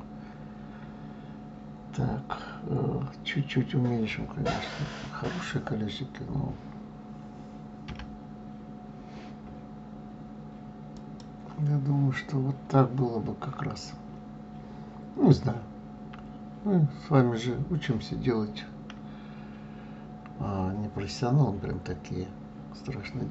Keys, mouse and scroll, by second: 7.9 s.